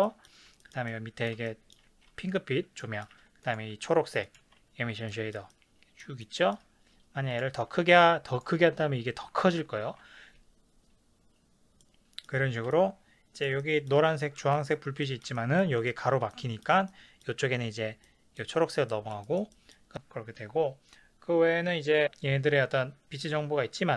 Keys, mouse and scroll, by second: 3.4 click, 3.7 g, 4.3 ctrl+click, 4.4 ctrl+z, 5.1-7.3 ctrl+middle drag, 6.2 shift+scroll down 1, 7.3 click, 7.7 s, 8.4 click, 10.1 ctrl+z, 11.8-17.2 middle drag, 18.9 middle click, 19.5-23.9 middle drag, 19.9 s, 20.3-22.0 scroll down 2.